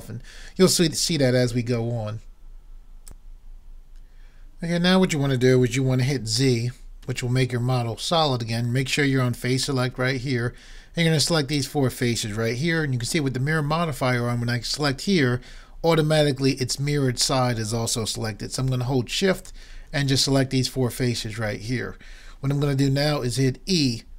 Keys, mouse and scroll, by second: 3.1-4.8 drag, 7.0 z, 11.6-13.2 drag, 13.2 middle click, 19.4-21.0 right drag, 21.0 click.